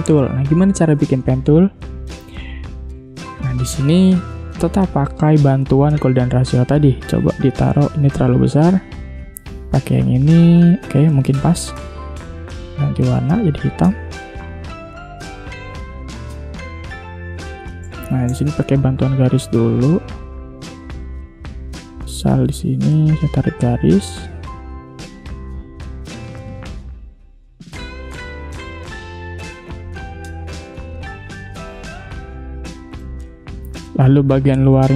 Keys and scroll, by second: 7.8 ctrl+z, 12.4 i, 13.4 v, 17.7 space, 18.7 p, 24.3 v, 24.9 shift+x, 25.7 a, 27.9 v, 33.0 space, 34.4 space.